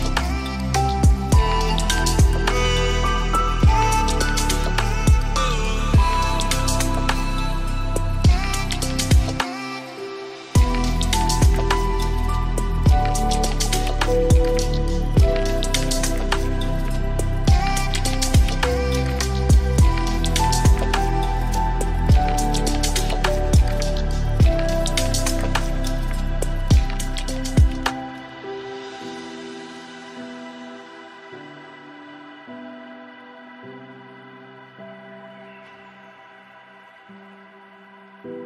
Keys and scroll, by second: 2.5 ctrl+space.